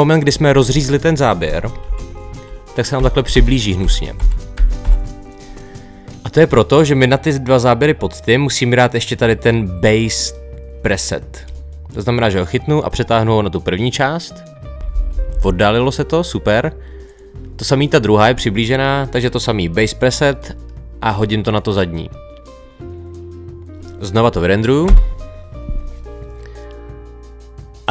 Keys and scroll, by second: 1.9 Right, 14.7 Left.